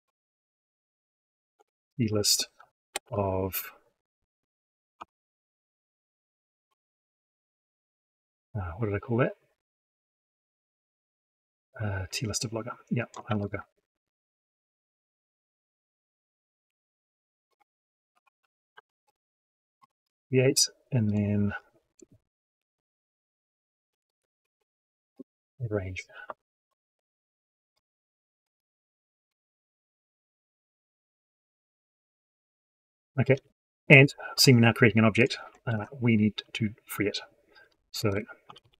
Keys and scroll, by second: 13.1 ctrl+c, 16.5 ctrl+v, 33.2 ctrl+shift+Left, 35.6 ctrl+shift+Up.